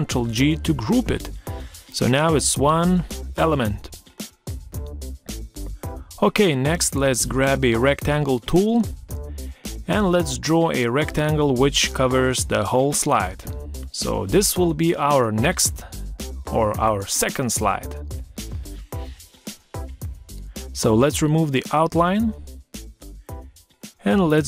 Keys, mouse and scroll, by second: 0.5 ctrl+z, 1.8 ctrl+scroll down 1, 2.8 ctrl+scroll down 1, 3.3 ctrl+scroll up 1, 4.2 ctrl+scroll up 1, 23.3 ctrl+scroll down 1, 23.9 ctrl+scroll down 1.